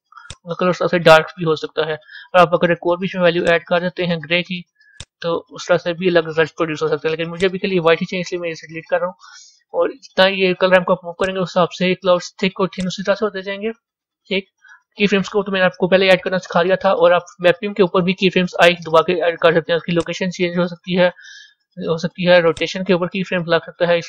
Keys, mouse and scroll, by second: 5.5-7.3 drag, 8.5 Delete, 11.1 click, 12.8-21.6 drag, 21.6 ctrl+z, 22.5-24.0 drag.